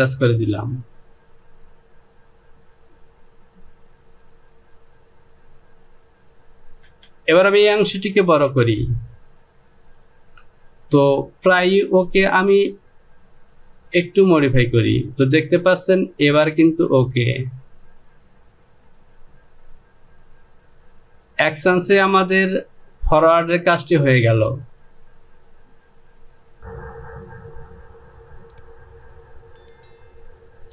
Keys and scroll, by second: 6.9 Return.